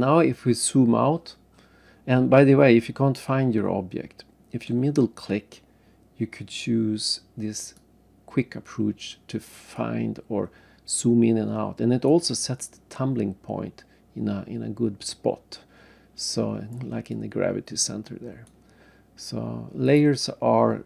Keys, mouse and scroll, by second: 0.2-0.9 scroll up 2, 1.1-1.6 scroll down 2, 4.7 middle click, 7.6 click, 9.7 right click, 12.6 right click, 17.1 right click, 19.8 click.